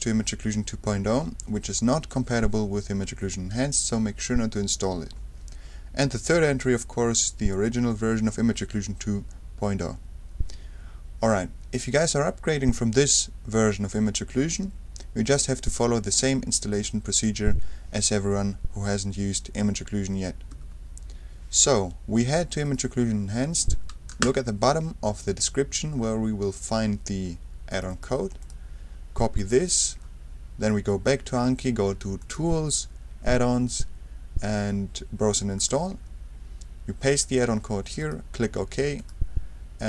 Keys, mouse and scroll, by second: 6.3 F3, 20.5 F3, 22.6 click, 25.0-26.3 scroll down 2, 26.4-27.0 scroll down 2, 27.7 click, 28.4 right click, 29.4 click, 30.7 click, 32.2 click, 35.6 click, 37.1 right click, 38.0 click, 39.0 click.